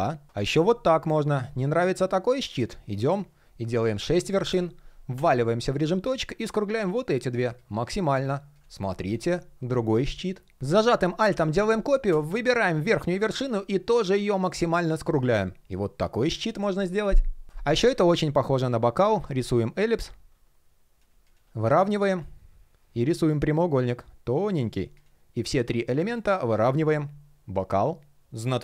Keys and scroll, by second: 21.3 alt+h, 25.8 alt+h.